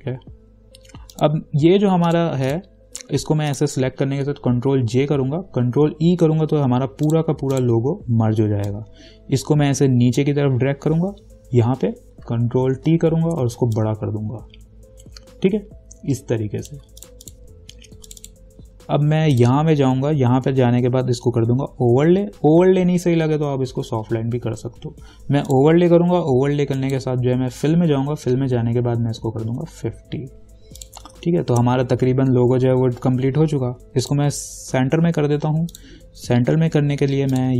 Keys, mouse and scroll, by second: 1.4 click, 3.7 ctrl+click, 5.1 ctrl+j, 6.2 ctrl+e, 7.3-13.0 drag, 13.0 ctrl+t, 14.0-17.2 alt+drag, 25.7 click, 29.4-29.8 typing, 31.0 click, 31.7 ctrl+-, 34.2 click, 34.3 click.